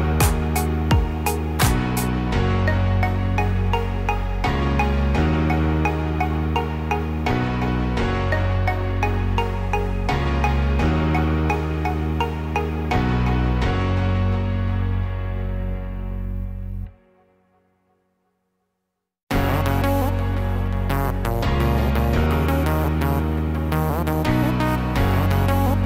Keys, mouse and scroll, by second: 2.7 z, 4.6 Tab, 5.1 click, 5.5 middle click, 6.3-7.2 scroll down 6, 7.1-8.1 scroll up 3, 10.0-11.0 scroll up 1, 11.0 middle click, 13.2 KP_1, 13.7 scroll up 2, 14.2 shift+middle click, 16.1 shift+a, 17.8-19.2 scroll down 5, 20.9 Tab, 21.3 r, 25.0 g.